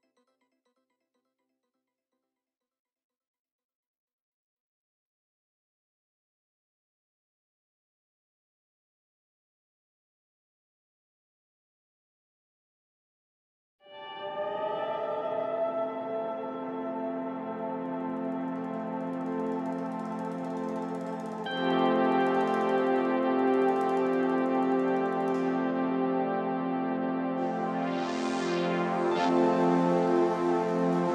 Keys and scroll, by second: 3.1 ], 4.5 [, 4.8 ], 18.4 ], 20.6 4, 23.2 ], 24.1 ], 25.1 4.